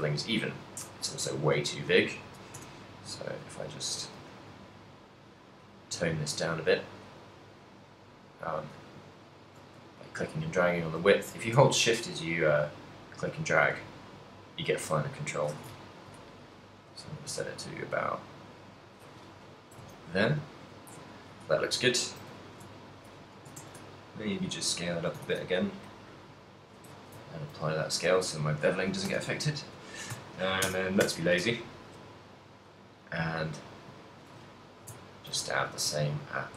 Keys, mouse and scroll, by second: 0.9 click, 3.4 click, 12.3 shift+click, 15.8 ctrl+middle click, 17.4 shift+click, 19.9 ctrl+middle click, 19.9 a, 20.7 right click, 21.0 KP_1, 22.1 ctrl+middle click, 22.5 shift+middle click, 22.8 ctrl+middle click, 23.3 s, 25.1 shift+click, 25.3 ctrl+a, 26.6 ctrl+middle click, 26.9 shift+middle click, 27.3 ctrl+middle click, 27.9 alt+d, 28.6 right click, 29.3 r, 31.7 g, 34.3 shift+click, 34.8 shift+middle click, 35.0 ctrl+middle click, 35.8 g.